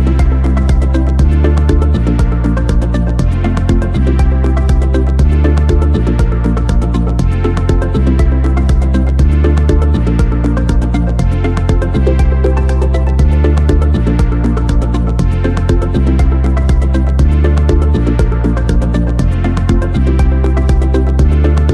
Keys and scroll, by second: 16.3 ctrl+c.